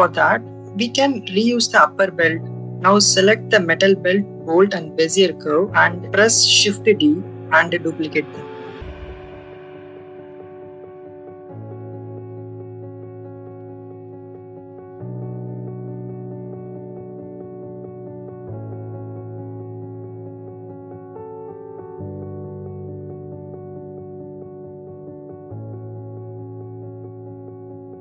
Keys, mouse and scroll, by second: 3.4 click, 4.5 shift+click, 5.9 shift+d, 6.1 right click, 7.0-9.1 drag, 12.5 click, 13.5 middle click, 14.1-14.6 scroll up 1, 15.4 middle click, 15.4 shift+s, 15.9-17.6 middle drag, 19.5 shift+click, 20.6 shift+middle click, 21.5 middle click, 22.3 middle click, 23.3 click, 24.2-25.9 middle drag, 26.4 middle click, 27.4 middle click, 27.8 shift+middle click.